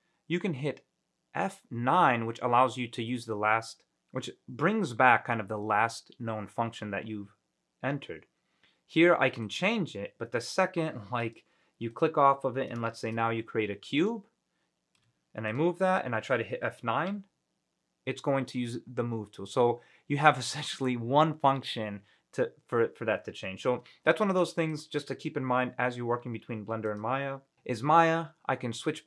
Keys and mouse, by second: 13.1 shift+a, 15.2 g, 15.6 click, 17.2 F9, 24.5-24.9 drag, 26.0 Delete, 27.1 click.